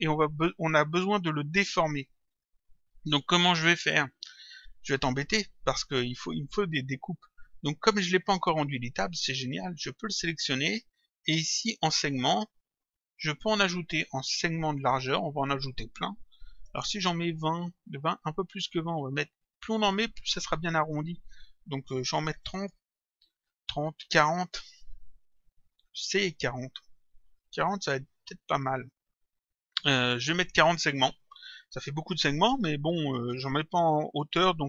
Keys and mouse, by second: 4.6 click, 9.8 click, 13.0 click, 15.2 click, 16.8 Return, 19.6 click, 22.6 Return, 24.2 click, 26.2 Return.